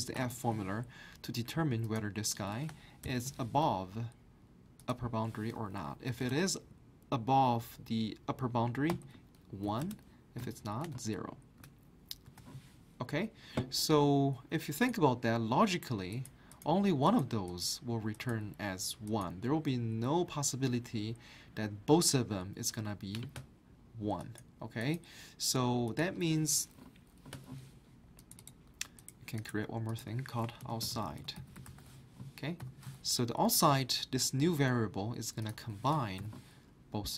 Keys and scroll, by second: 0.0-0.7 typing, 2.8-3.5 typing, 5.9-6.6 typing, 8.6-10.9 typing, 12.3 Return, 30.4-33.1 typing.